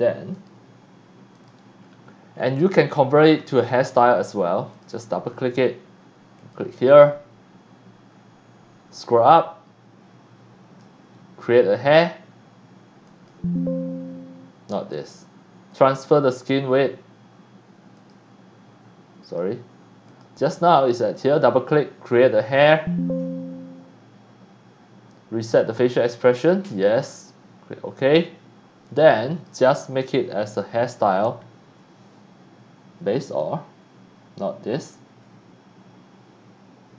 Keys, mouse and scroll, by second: 0.3 click, 1.3 click, 1.9 scroll up 1, 2.4 scroll down 1, 3.6 c, 3.7-4.3 drag, 4.8 click, 4.9 click, 6.4 click, 6.9 click, 9.0-10.8 drag, 13.0 click, 14.9 click, 15.7 click, 18.0 click, 19.2 click, 20.1 click, 20.6 click, 20.8 click, 22.6 click, 26.7 click, 28.8-29.5 drag, 33.2 click.